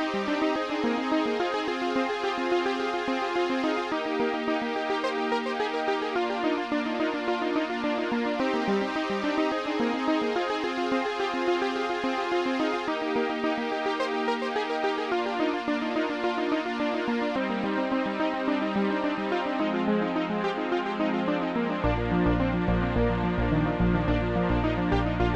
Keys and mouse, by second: 0.4 click, 0.9 Return, 2.6 shift+click, 3.9 shift+click, 5.5 shift+click, 6.4 Return, 7.6 shift+click, 7.7 shift+click, 12.9 click, 13.8 click, 14.7 click, 15.2 click, 16.3 click, 19.5 click, 20.3 Delete, 20.3 click, 22.7 click, 22.8 Delete, 22.8 right click, 23.8 click, 23.8 right click, 24.4 ctrl+click.